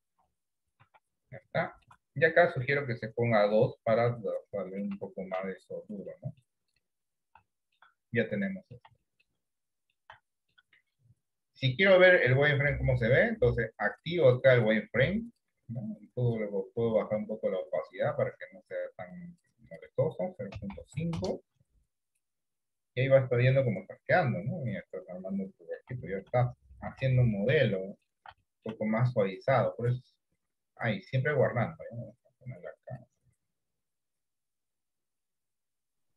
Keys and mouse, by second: 0.9 Tab, 1.7 shift+middle click, 4.2 middle click, 5.1 Tab, 5.4 Tab, 6.2 middle click, 7.6 shift+middle click, 8.6 middle click, 9.1 shift+middle click, 9.7 middle click, 10.3 shift+middle click, 11.7-21.9 drag, 22.6 middle click, 23.8-25.8 middle drag, 26.2 shift+middle click, 26.5 middle click, 27.2 shift+middle click, 27.8 middle click, 28.5 shift+middle click, 29.9-31.1 drag.